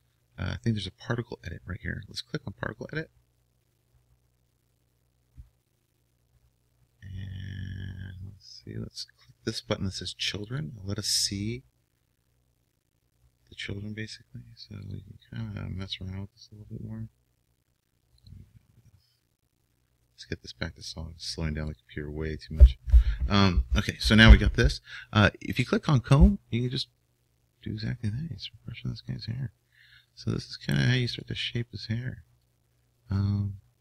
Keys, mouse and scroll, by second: 0.3 click, 3.9 click, 13.4-15.2 drag, 15.6-20.4 drag, 25.8-33.8 drag.